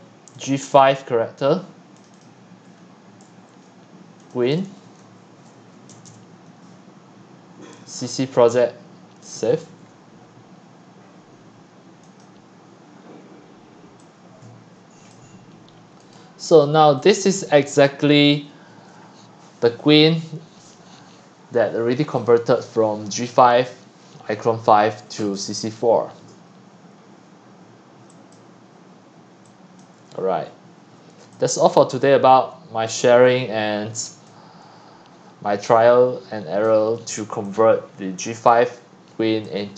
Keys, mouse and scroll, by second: 0.4 click, 2.0 click, 2.1 click, 4.7-5.9 typing, 8.1-13.9 drag, 14.0-15.5 drag, 15.5 middle click, 15.5-16.0 scroll, 16.1-22.2 drag, 28.1-30.2 drag, 30.2-30.6 scroll down 9, 30.9 click, 31.2-32.5 typing, 34.0 click, 34.3 typing, 34.6-35.2 scroll, 35.3-36.6 scroll, 36.6 click, 37.3 scroll, 37.9-38.3 scroll, 38.5 click, 38.6 click, 38.8-39.4 scroll down 11.